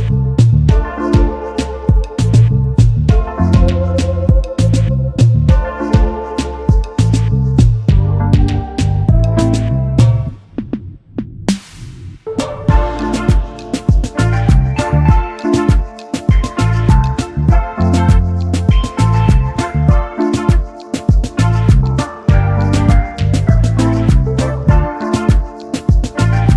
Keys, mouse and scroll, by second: 1.9 double click, 4.4 space, 4.5 double click, 5.7 shift+click, 12.5 typing, 14.3 typing, 15.2 ctrl+f, 17.5 Up, 18.7 Right, 19.0 Up, 19.2 Right, 20.0 typing, 21.3 typing, 22.0 double click, 22.7-23.0 alt+scroll up 1, 24.6 Left, 25.0 Down, 26.0-26.5 alt+scroll down 1.